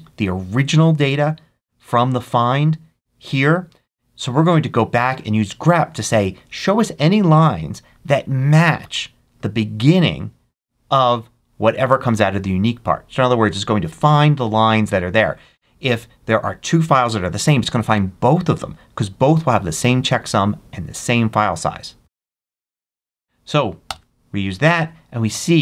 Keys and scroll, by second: 22.0 Right, 23.7 Return.